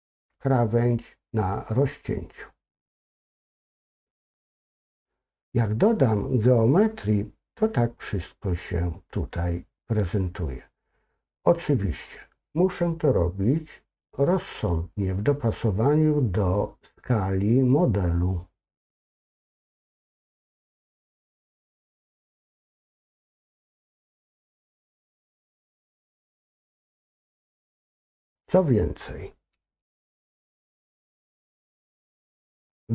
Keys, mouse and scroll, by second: 3.5 click, 3.9 click, 4.1 click, 4.4 click, 4.6 click, 19.0-24.4 drag, 21.2 BackSpace.